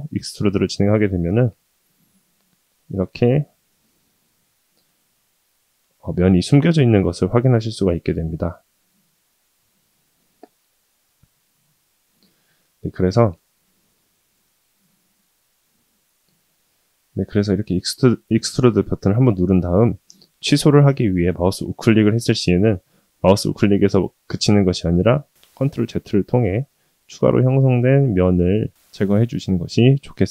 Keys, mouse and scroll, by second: 4.1-4.4 scroll up 1, 4.4 scroll down 1, 4.8 2, 5.5 click, 6.0 alt+click, 6.8 g, 10.8 shift+middle drag, 11.2 middle drag, 12.6 alt+click, 13.4 g, 15.2 ctrl+z, 15.4 ctrl+z, 17.3 g, 18.9 g, 20.7 shift+middle click, 21.5 e, 25.0 middle click, 28.5 ctrl+z, 29.3-29.7 middle drag, 30.0 g.